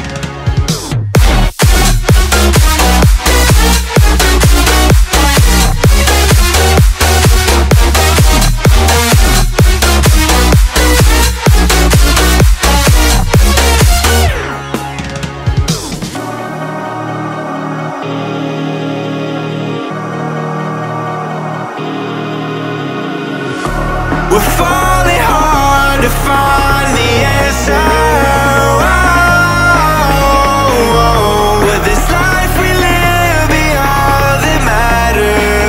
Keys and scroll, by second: 5.7 ctrl+[, 12.4 Return, 14.4 ctrl+j, 18.3 Return, 26.1 Return, 31.3 Return, 34.7 ctrl+j, 35.5 ctrl+y.